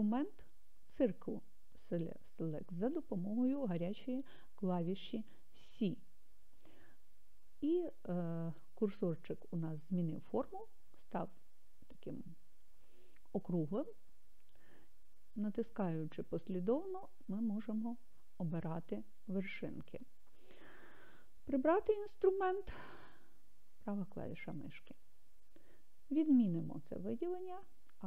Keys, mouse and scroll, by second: 7.6 c, 23.2 right click.